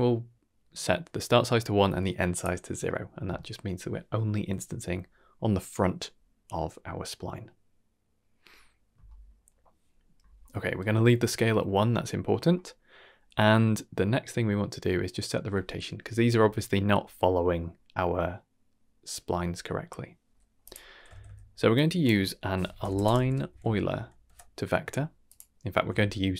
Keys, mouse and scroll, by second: 2.3 click, 10.2 scroll up 1, 10.3 scroll down 1, 10.5 middle click, 11.6 scroll down 2, 11.9 middle click, 12.4 scroll down 2, 12.6 middle click, 13.8 middle click, 15.7 middle drag, 16.4-16.7 shift+middle drag, 17.7-19.9 middle drag, 20.3 middle click, 20.6 click, 21.1 shift+a, 25.9 shift+d.